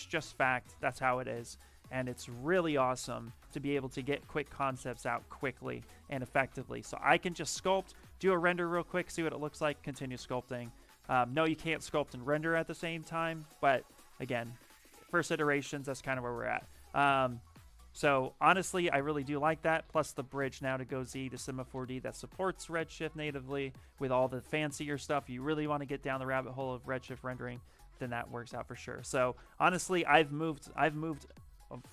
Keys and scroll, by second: 16.5 shift+f.